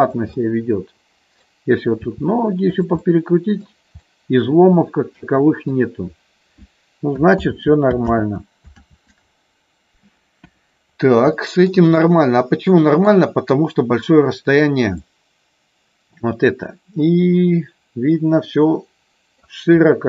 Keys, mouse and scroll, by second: 0.4-1.5 middle drag, 2.0 r, 2.7 click, 3.0 middle click, 4.0-5.6 middle drag, 7.6 ctrl+z, 8.4 ctrl+z, 10.4 KP_1, 11.3 shift+middle click, 12.0 middle click, 15.0-19.5 middle drag.